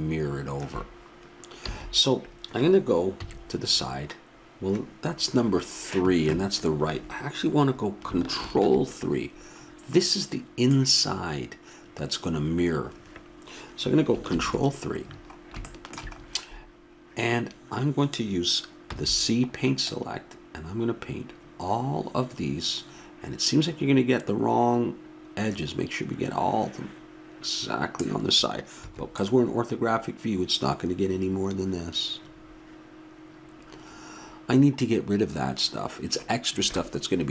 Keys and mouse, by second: 1.6 a, 3.2 KP_3, 8.4 ctrl+KP_3, 14.3 ctrl+KP_3, 17.4-22.4 middle drag, 18.9 c, 30.5 middle click.